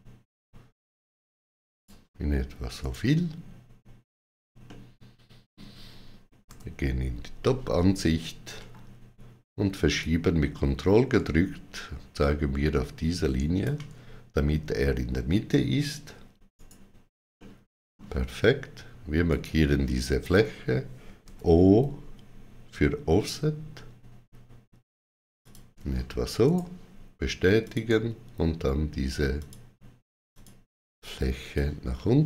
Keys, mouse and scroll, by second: 2.6 right click, 4.5 middle click, 6.3 KP_7, 8.4 g, 9.8 click, 16.4 right click, 17.2 middle click, 19.1 click, 21.1 o, 25.2 shift+click, 26.3 right click, 27.5 shift+click, 29.2 click, 31.7 click.